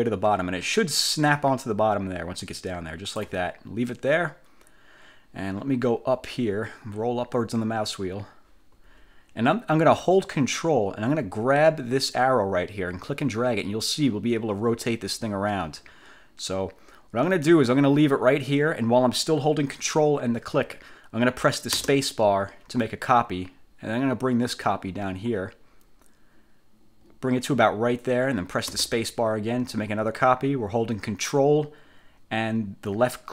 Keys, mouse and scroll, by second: 6.3-6.9 scroll up 4, 7.3 scroll up 2, 7.5-8.1 scroll down 3, 13.1-33.3 ctrl+drag, 21.9 ctrl+space, 28.9 ctrl+space.